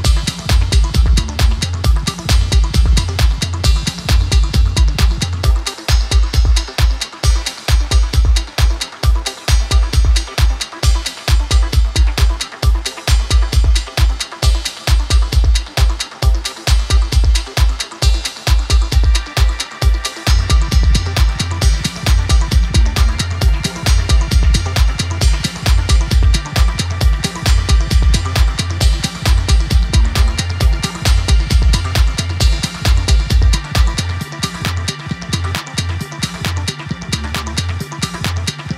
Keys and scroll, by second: 29.5 super+d.